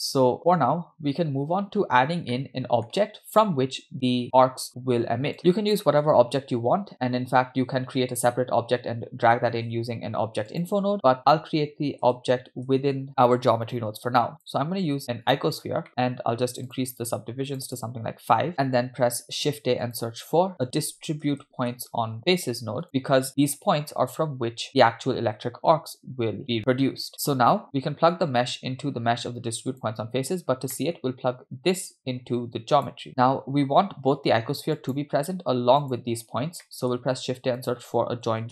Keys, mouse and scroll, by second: 1.0-1.4 scroll up 3, 1.8 scroll up 2, 2.2 scroll down 1, 2.3-2.9 middle drag, 5.4 click, 5.4 scroll down 1, 5.5 middle click, 6.0 shift+a, 9.5 shift+a, 12.8 BackSpace, 13.0 BackSpace, 15.6 scroll up 2, 16.3 middle click, 16.5 click, 17.5 click, 17.7 click, 19.0 shift+a, 26.4 click, 29.1-29.7 scroll up 3, 29.7 click, 30.5 scroll down 2, 30.8 middle click, 31.8-32.9 drag, 34.8 click, 35.8 click, 36.7 middle click, 37.2 shift+a.